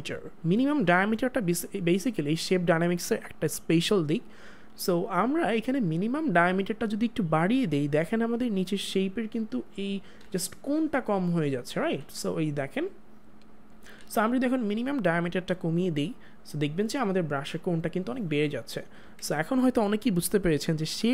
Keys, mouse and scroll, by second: 5.6 click, 10.1 click, 10.2 ctrl+z, 15.5 click, 18.8 click, 19.0 ctrl+z.